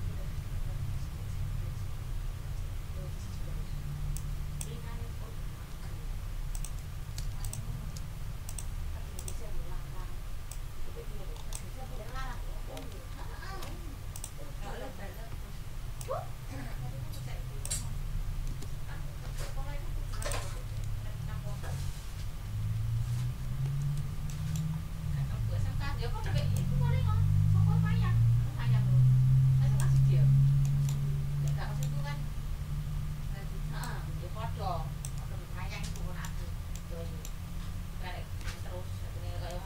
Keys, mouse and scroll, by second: 1.0-1.7 ctrl+scroll up 4, 1.9 ctrl+scroll down 2, 4.1 click, 6.5 click, 7.4 ctrl+shift+click, 9.1 click, 10.5-11.7 ctrl+drag, 11.9 ctrl+z, 12.9 shift+Down, 14.1 click, 16.0-17.8 ctrl+drag, 18.5 Delete, 20.2 click, 22.3 shift+Up, 24.3 ctrl+click, 24.4 ctrl+middle click, 24.8-25.4 ctrl+scroll up 4, 26.5-29.9 shift+drag, 30.6 click, 30.8 scroll up 3, 31.0 ctrl+scroll down 2, 31.4 ctrl+click, 32.6-33.2 ctrl+scroll up 4, 33.8 click, 33.8-35.3 middle drag, 35.3-35.6 ctrl+scroll down 2, 35.9 ctrl+click, 36.4 ctrl+scroll down 2, 36.7 ctrl+middle click, 37.5 ctrl+scroll up 2, 39.1 d.